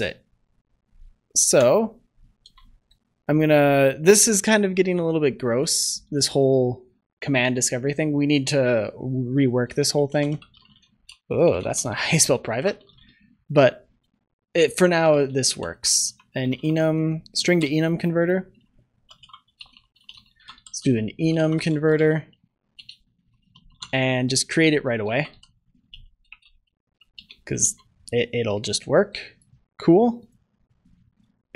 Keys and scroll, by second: 2.3 ctrl+s, 17.6 Return, 26.4 Return, 27.6 ctrl+s.